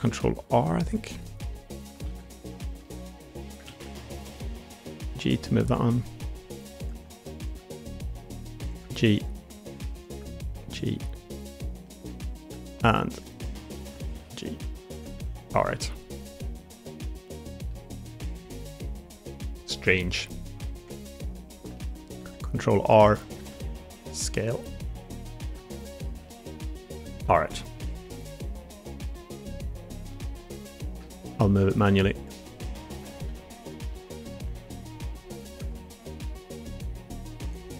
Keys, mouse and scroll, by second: 2.0 ctrl+z, 2.2 middle click, 2.7 middle click, 3.6 alt+z, 4.0 click, 4.4 g, 5.7 middle click, 6.4 g, 7.0 middle click, 7.4 click, 7.5 g, 8.6 click, 9.2 g, 10.4 middle click, 10.6 click, 11.2 click, 12.4 middle click, 13.0 click, 13.2 g, 14.1 g, 15.1 middle click, 15.7 Tab, 16.0-16.5 middle drag, 16.5-17.6 drag, 18.0 middle click, 18.1 click, 18.3-19.8 middle drag, 20.2 middle drag, 20.6 Tab, 20.9 middle click, 21.6 middle click, 22.1 ctrl+r, 23.3 s, 25.6 Tab, 26.2-26.7 middle drag, 27.1-27.6 middle drag, 27.9 Tab, 28.2 middle click, 29.0 middle click, 30.0 middle click, 30.9 shift+middle click, 31.2 middle click, 31.7 2, 32.0 click, 32.3 middle click, 33.0 alt+z, 33.8 middle click, 34.4 g, 35.4 click, 35.6 middle click.